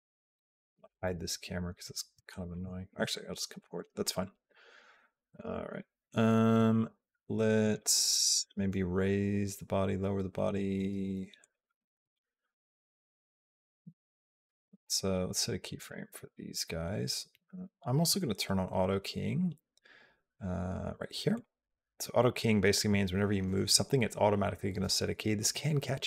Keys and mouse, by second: 2.1 shift+click, 2.9 shift+click, 7.5 click, 7.9 g, 21.1 click.